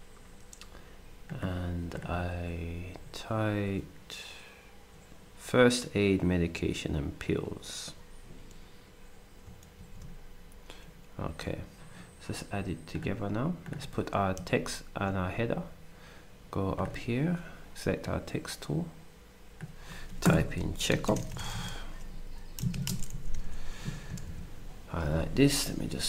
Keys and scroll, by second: 9.8 ctrl+c, 21.0-21.5 typing, 22.6-23.4 typing.